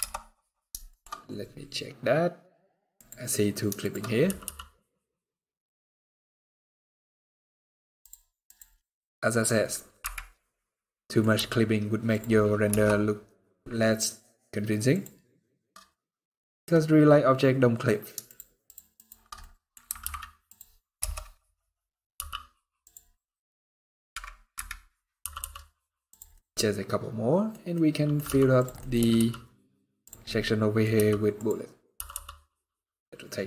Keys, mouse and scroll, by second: 0.6 shift+middle click, 0.8-1.1 scroll up 10, 2.6 click, 3.5 shift+click, 3.9 r, 8.1 click, 8.6 middle click, 9.2-9.6 scroll up 1, 9.7 KP_Decimal, 10.5 middle click, 11.0 g, 12.4 KP_0, 13.7-14.1 scroll down 2, 14.6 click, 15.7 middle click, 17.9 shift+click, 19.1 middle click, 19.7 alt+d, 20.7 KP_0, 21.6 scroll up 1, 21.8 g, 22.8 middle click, 24.2 KP_Decimal, 24.9 r, 26.0 middle click, 27.4 middle click, 27.9 g, 28.5 middle click, 28.7 r, 29.9 middle click, 30.6 g, 31.6 r.